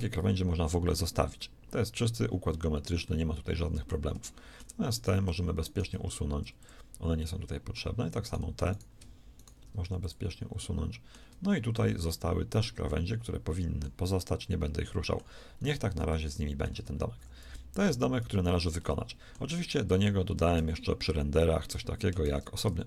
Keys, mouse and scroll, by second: 5.9 shift+x, 10.4 x, 17.1 a, 17.3 z, 18.1 z, 20.4 shift+a, 21.5 Tab, 22.1 shift+a.